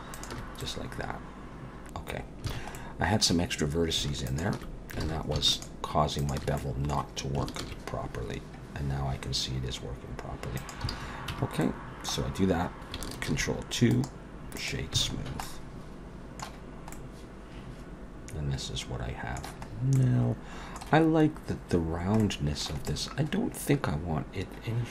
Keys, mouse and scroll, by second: 0.1 alt+shift+click, 0.6 middle click, 2.5 alt+a, 2.7 middle click, 4.3 alt+shift+click, 5.0 alt+a, 5.5 alt+shift+click, 6.2 alt+shift+click, 6.6 middle click, 7.6 ctrl+b, 10.9 alt+a, 11.3 Tab, 11.6 middle click, 13.3 ctrl+2, 13.9 right click, 15.0 alt+a, 15.2-15.5 scroll down 3, 15.4 middle click, 16.6-18.1 scroll up 2, 16.9 middle click, 19.7-20.8 scroll up 2, 19.9 middle click, 21.8-22.2 scroll down 2, 22.2 middle click, 22.9 middle click.